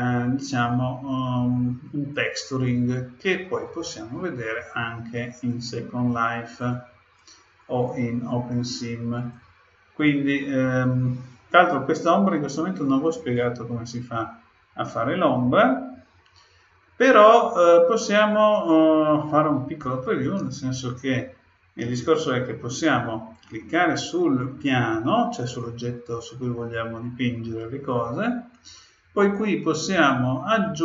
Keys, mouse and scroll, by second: 2.1-5.0 drag, 5.5-11.1 drag, 25.4-27.1 drag, 29.3-30.8 drag.